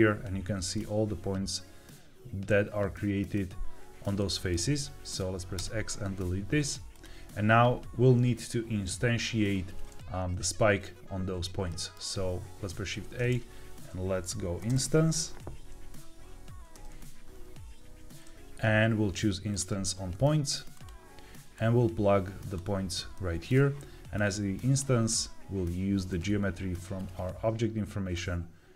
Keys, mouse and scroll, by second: 0.7-3.9 middle drag, 4.1-4.5 shift+middle drag, 5.0 click, 5.5 x, 6.8 click, 11.6 middle click, 12.7 shift+a, 21.5-22.5 drag, 23.0 middle click, 24.1 click, 26.0-28.1 drag.